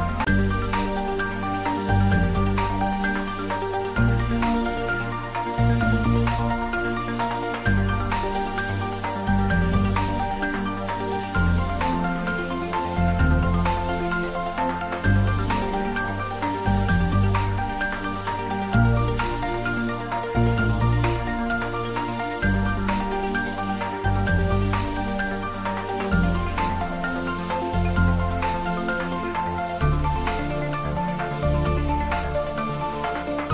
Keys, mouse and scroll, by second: 0.6 g, 2.2 click, 2.6 shift+s, 2.9 click, 4.3 ctrl+middle click, 6.7 shift+d, 8.7 click, 9.6 r, 11.2 click, 11.7 ctrl+middle click, 12.0 shift+middle click, 12.7 shift+d, 13.3 c, 15.9 x, 18.2 click, 18.9 r, 20.7 click, 21.3 shift+d, 21.7 x, 23.3 click, 24.0 r, 24.8 click, 25.2 shift+s, 25.5 click, 26.2 shift+d, 28.4 click, 30.2 click, 30.4 ctrl+s, 31.4 click, 32.5 click, 33.1 shift+click.